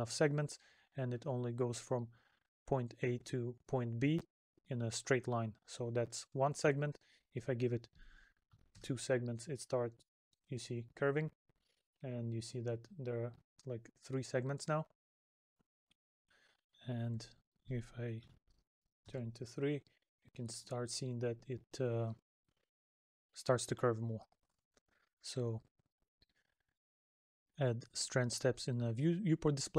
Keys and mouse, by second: 0.4 middle click, 2.7 middle click, 9.8 middle click, 14.2 middle click, 23.6 middle click, 24.9 middle click, 26.8 middle click.